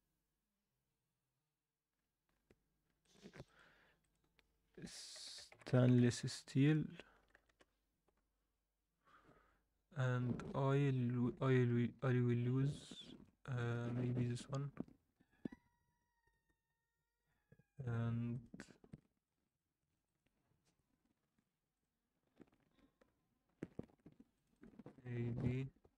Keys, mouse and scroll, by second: 2.8 scroll down 1, 3.0-10.4 drag.